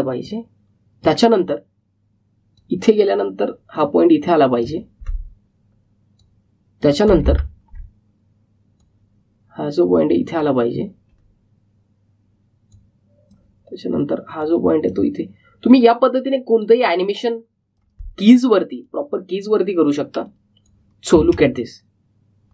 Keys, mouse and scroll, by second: 3.6-4.3 typing, 8.4-8.7 alt+scroll down 1, 9.7-13.6 drag, 13.6-22.1 drag, 22.1 space.